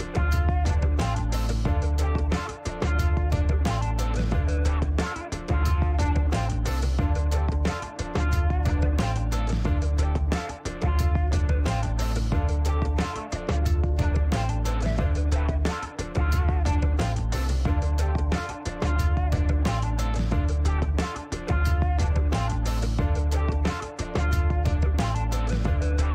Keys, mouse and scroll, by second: 0.4 click, 1.1 click, 1.6 right click, 2.2 click, 6.5 click, 7.2 click, 8.5 KP_6, 9.1 KP_Enter, 10.9 click, 11.9 middle click, 14.0 click, 15.0 shift+right click, 16.8 click, 17.4 click, 18.6 click, 19.5 middle click, 21.1 click, 22.2 click, 23.2 right click, 23.7 click, 25.3 click.